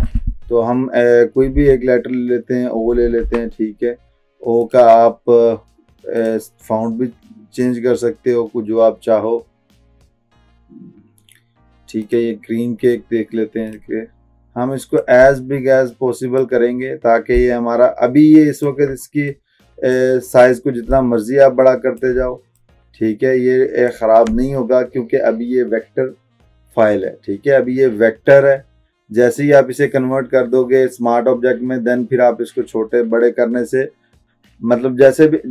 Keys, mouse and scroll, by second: 1.6 o, 3.3 ctrl+a, 4.7 click, 12.1-15.2 drag.